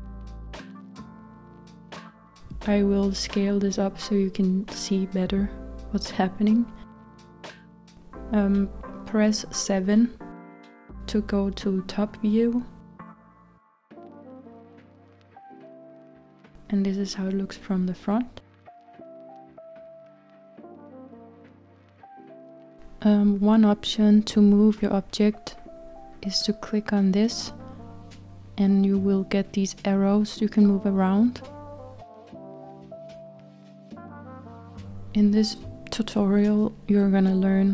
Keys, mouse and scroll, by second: 2.5-4.8 s, 10.1 KP_7, 14.9 KP_1, 18.5 scroll down 1, 18.8-20.8 middle drag, 20.8-23.1 scroll up 1, 23.1-23.9 scroll up 1, 25.2-28.2 drag, 28.4-30.0 middle drag, 30.0-31.3 scroll up 2, 31.3 click, 33.7 click, 34.0-35.1 drag, 35.1-37.7 scroll down 3.